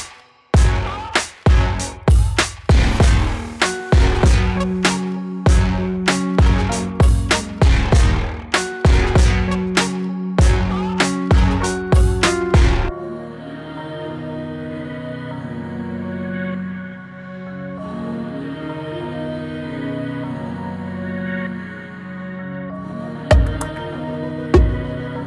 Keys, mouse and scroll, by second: 7.7-9.1 drag, 9.2-13.6 shift+drag, 13.6 scroll down 1, 15.6-24.8 drag.